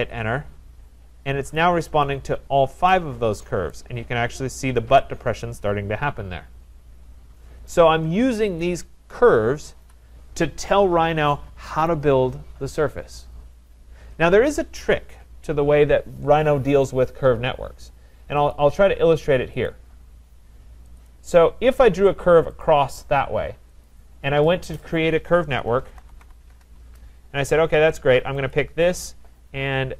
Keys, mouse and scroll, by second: 0.0 Return, 2.0 click, 2.5-2.9 scroll, 3.7 right click, 3.9-4.6 scroll, 4.6-5.0 scroll, 7.7 right click, 7.8 scroll, 7.9 middle click, 8.6 click, 9.8 Delete, 11.9 right click, 18.6 click, 19.7 click, 21.0 click, 21.7 Return, 22.6 click, 23.9 click, 25.5-26.7 typing, 28.5 click.